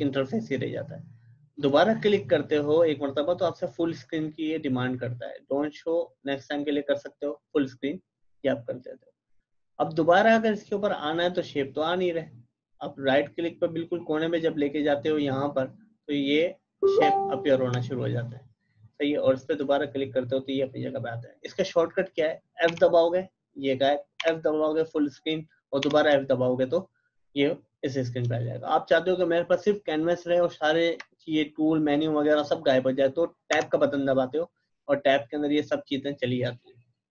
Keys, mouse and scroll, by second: 1.6 click, 7.2 click, 19.5 click, 22.7 f, 27.5-28.2 typing, 33.3-34.0 typing.